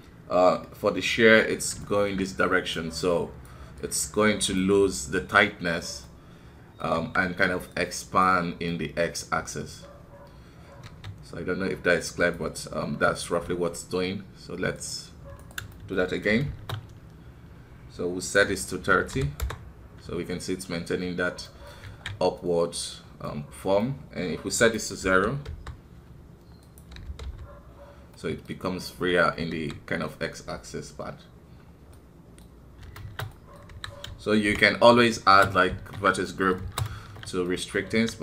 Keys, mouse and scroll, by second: 1.8 shift+middle click, 2.4-6.0 drag, 6.0 middle click, 6.9 KP_1, 7.7-10.8 drag, 10.8 q, 14.7-15.7 drag, 15.7 shift+middle click, 16.1-16.4 scroll up 1, 16.4 shift+space, 21.2 click, 21.5 middle click, 21.9 alt+a, 22.4 middle click, 22.9 scroll up 2, 23.3-26.6 middle drag, 26.6-28.2 drag, 28.2-29.5 middle drag, 29.5 KP_1, 31.6 scroll down 2, 32.0 middle click, 32.7-33.0 scroll up 2, 33.0 shift+space, 33.3 middle click, 33.7 KP_1, 34.4 shift+Left, 35.2-37.9 typing, 36.2 middle click, 37.4 middle click.